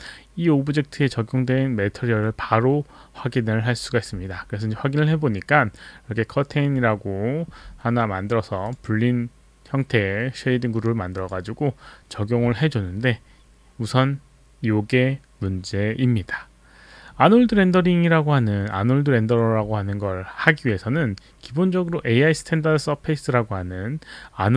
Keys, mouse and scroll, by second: 8.6 click, 11.1 click, 21.0-23.6 scroll up 2, 23.6-24.5 scroll up 1.